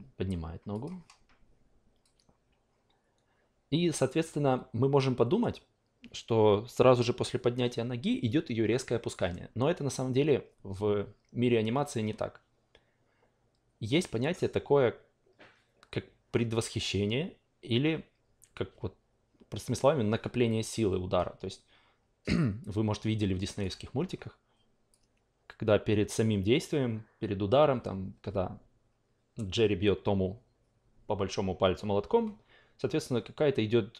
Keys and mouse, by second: 0.7 click, 2.0-23.7 drag, 24.9-33.9 drag.